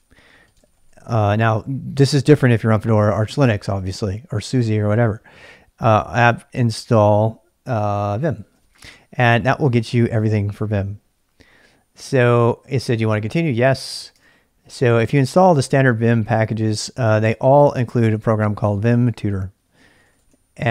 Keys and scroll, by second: 0.0-1.1 typing, 8.0-8.9 typing, 13.9 typing, 14.1 Return, 16.9-20.7 typing.